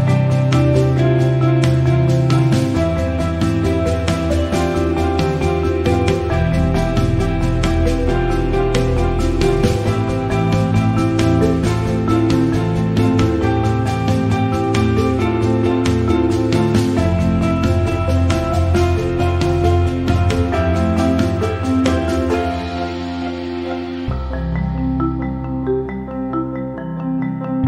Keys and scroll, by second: 24.7 alt+shift+t.